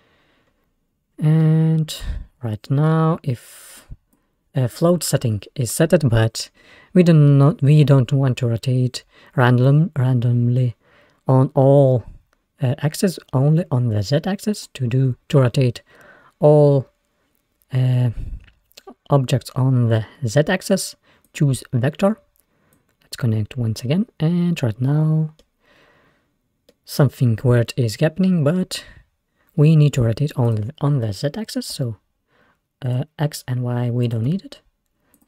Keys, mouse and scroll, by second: 0.2 scroll down 1, 0.4-1.1 scroll up 4, 1.1-1.5 scroll down 1, 1.5-3.9 middle drag, 3.9 click, 6.0-6.4 scroll down 2, 6.8-7.3 scroll up 1, 7.3-10.2 middle drag, 14.6-17.5 drag, 22.8-24.6 drag, 24.6-30.3 middle drag, 30.5-33.0 drag, 34.1-35.2 drag.